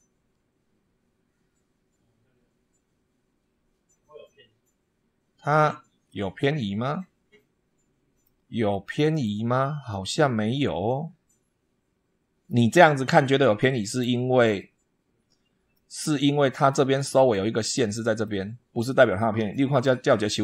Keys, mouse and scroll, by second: 3.7 scroll down 2, 5.9-8.2 middle drag, 8.5-9.2 middle drag, 9.7-12.5 drag, 13.7 click, 15.6-16.7 middle drag, 17.1 middle click, 18.0 scroll up 1, 19.3-19.8 shift+middle drag.